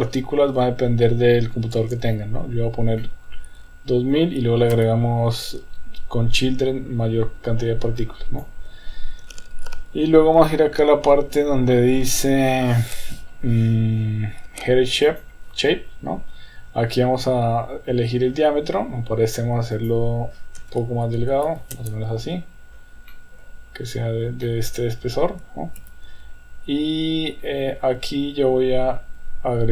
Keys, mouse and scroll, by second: 3.0-4.1 middle drag, 4.7 KP_1, 8.0 click, 15.0 click, 19.7-22.3 drag, 23.1-24.0 middle drag, 24.4-25.1 middle drag, 25.8 KP_1.